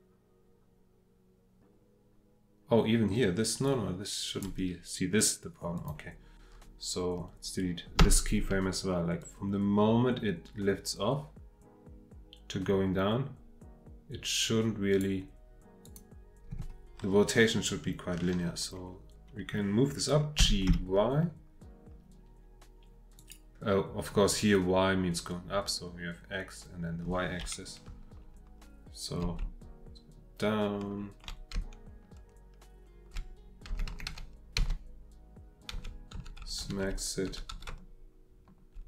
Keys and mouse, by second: 5.8 click, 8.0 Delete, 9.2-15.0 drag, 15.8 click, 20.4 g, 20.7 y, 23.1 click, 27.9-29.1 Left, 29.4-31.1 Right, 31.5 Right, 31.5-33.1 Left, 33.7 Left, 33.9 Left, 34.1 Left, 34.5 Left, 35.7 Right, 36.1 Right, 36.4 Right, 36.6 Right, 36.8 Right, 37.2 Right, 37.5 Right, 37.7 Right, 38.2 Right, 38.3 Right.